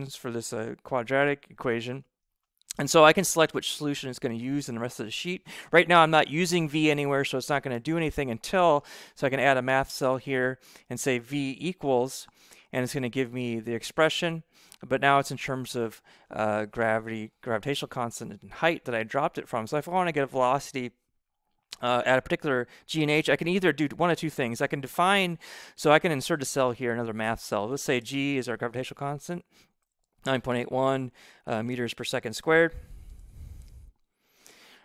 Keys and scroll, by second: 11.1-12.1 typing, 27.9 g, 29.0-34.4 typing.